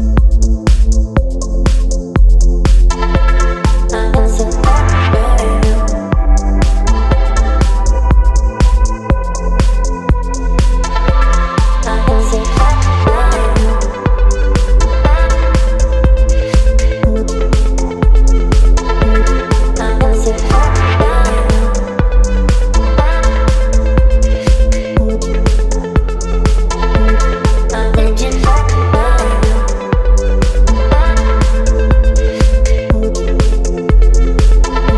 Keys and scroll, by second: 1.3 Down, 1.8 space, 2.4 e, 3.8 ], 4.5 ], 8.6 space, 10.9 space, 12.0 v, 12.5 space, 16.4 ], 17.8 space, 26.0 space.